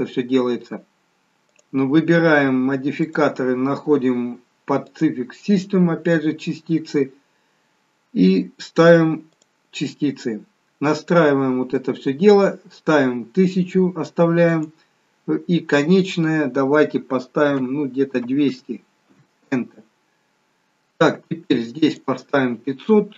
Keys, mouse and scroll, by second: 1.6 click, 9.5 click, 14.6 click, 22.0 click.